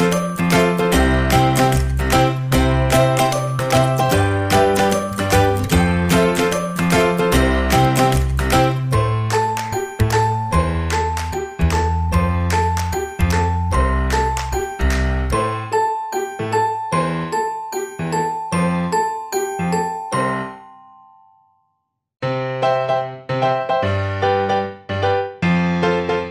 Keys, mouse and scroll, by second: 0.6-5.2 drag, 7.3-9.2 drag, 8.7 middle click, 9.2 middle click, 9.8 click, 9.8 right click, 10.4-11.7 drag, 10.9-12.6 middle drag, 12.7-16.0 drag, 16.0-19.2 middle drag, 19.3 middle click.